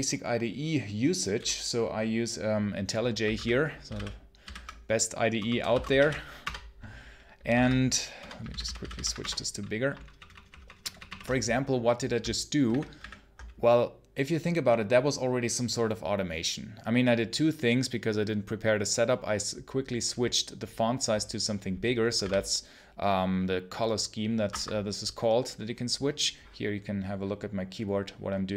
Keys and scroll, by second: 3.2 Menu, 3.7 Down, 3.8 Right, 4.3 Down, 5.2 Return, 5.3-7.4 typing, 8.0 Return, 8.3 Down, 9.0 Return, 9.9 ctrl+shift+=, 10.4 ctrl+shift+=, 12.5 alt+1, 12.8 alt+1, 22.0 space, 22.0 s, 24.4 Escape.